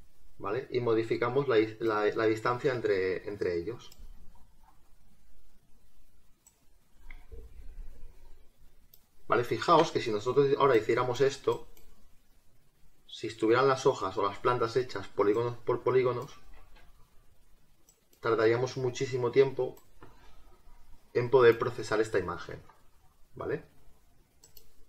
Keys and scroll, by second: 16.6 ctrl+z.